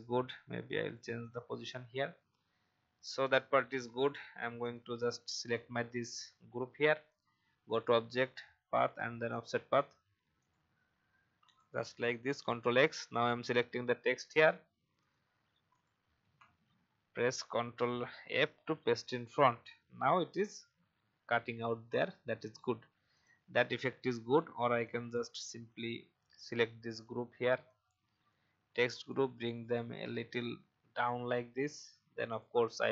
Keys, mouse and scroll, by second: 12.3 ctrl+x, 13.1 click, 16.2 ctrl+f, 19.2 click, 19.9 alt+scroll up 1, 21.9 click, 22.5 alt+scroll down 1, 23.6 alt+scroll up 1, 24.5-28.8 drag, 28.9-29.5 Down, 32.3 click.